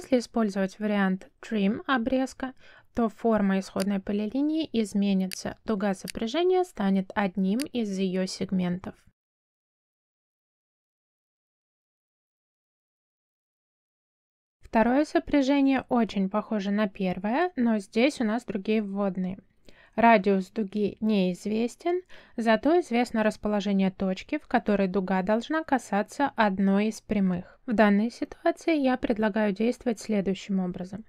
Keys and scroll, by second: 0.0 f, 0.2 space, 0.9 t, 1.3 space.